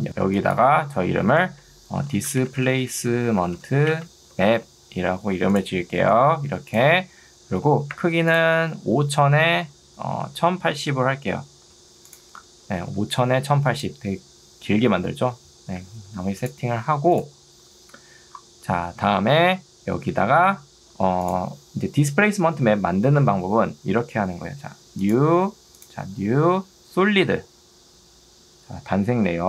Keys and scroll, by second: 0.1 Escape, 1.1-4.5 typing, 5.9 ctrl+2, 9.1 5, 10.1 Tab, 10.3-11.2 typing, 12.9 ctrl+2, 15.9 Escape.